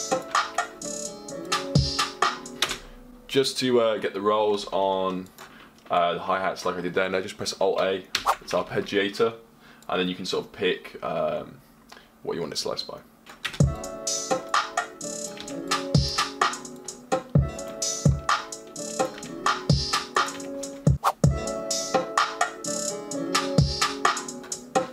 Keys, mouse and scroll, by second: 13.2 ⁘.